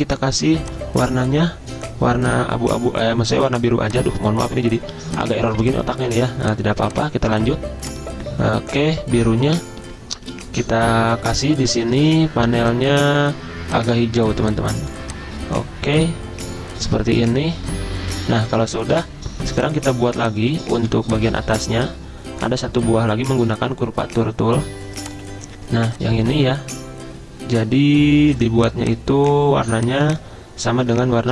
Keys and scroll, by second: 4.9 z, 6.3 v, 11.2 F6, 20.8 v, 22.9 ~, 30.9 i.